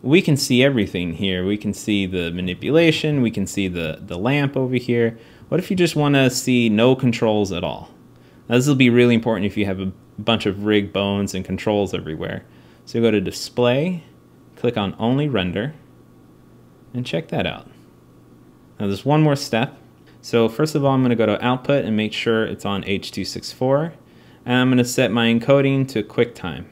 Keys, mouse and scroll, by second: 16.6-18.7 drag, 20.0-26.7 drag.